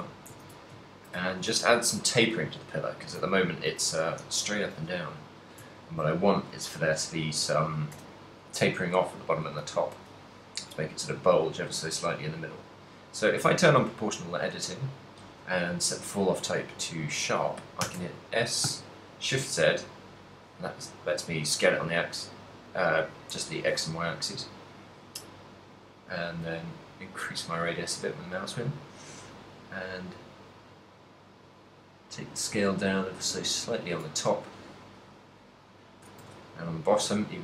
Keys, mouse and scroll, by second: 0.0 Tab, 0.4 a, 1.0 ctrl+middle click, 1.7 z, 1.9 n, 2.2 click, 2.8 n, 3.3 ctrl+middle click, 4.8 b, 8.0 o, 9.6 click, 11.0 click, 13.7 click, 15.4 click, 18.1 s, 33.8 click, 34.2 a, 34.6 b, 36.2 s.